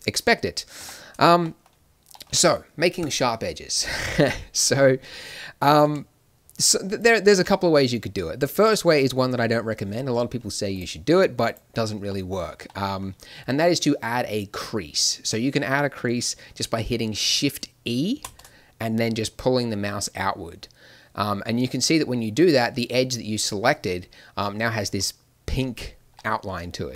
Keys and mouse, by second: 0.8 Tab, 4.3-18.1 right drag, 18.1 shift+e, 24.9 a, 26.1 middle click.